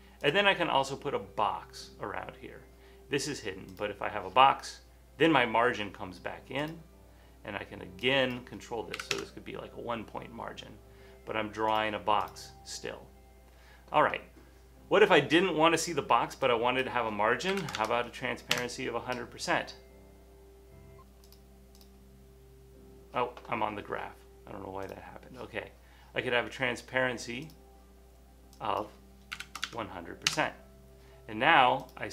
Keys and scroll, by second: 9.1 1, 9.2 Tab, 11.6 typing, 17.4-18.3 typing, 29.2-30.6 typing, 30.3 Return.